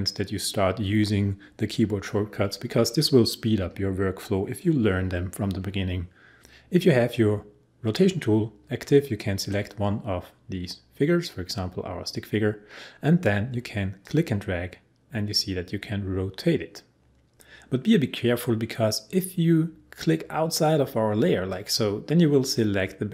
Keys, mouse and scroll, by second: 9.4 click, 14.0-17.3 drag, 21.5-23.1 drag.